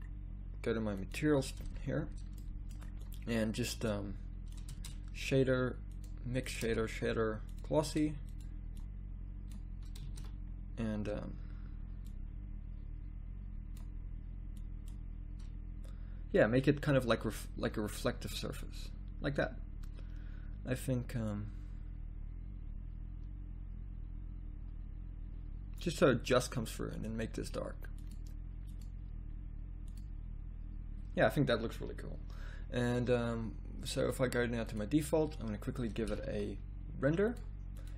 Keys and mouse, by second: 9.7 shift+a, 10.5 shift+z, 36.2 z, 36.3 z.